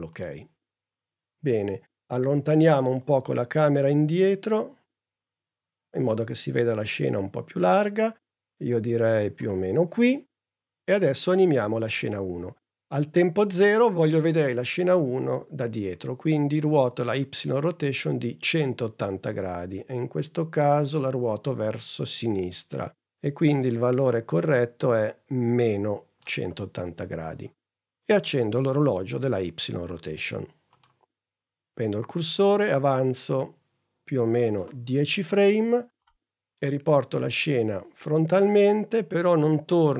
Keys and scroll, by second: 2.7 p.